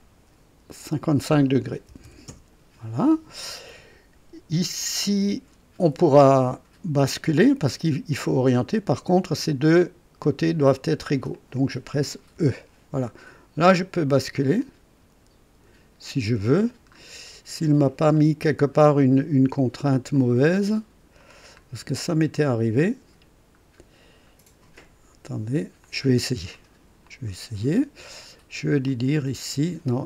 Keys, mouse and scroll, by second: 0.8 click, 1.9 KP_5, 2.2 Return, 7.0-9.5 drag, 10.2 click, 11.3 click, 12.3 typing, 14.5-16.3 drag, 16.9 scroll up 1, 18.1 right click, 20.1-21.3 drag, 21.5 scroll up 1, 23.5-23.8 scroll down 1, 25.8 click, 27.0 click, 28.8 click.